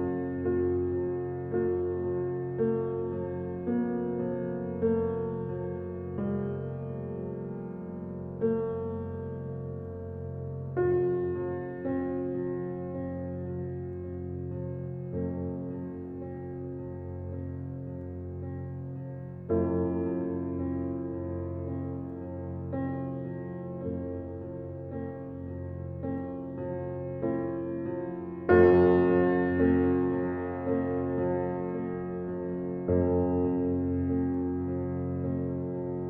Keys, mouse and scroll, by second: 2.5 scroll up 1, 3.8 click, 4.2 scroll down 1, 5.8-6.5 scroll up 1, 7.7 scroll down 1, 10.8-12.0 typing, 18.2 click, 19.0-19.5 scroll up 1, 19.7 click, 20.7-21.4 scroll up 1, 21.4 click, 23.5-24.5 scroll down 1, 28.9-30.5 scroll down 1, 30.5 ctrl+shift+click, 32.6 click.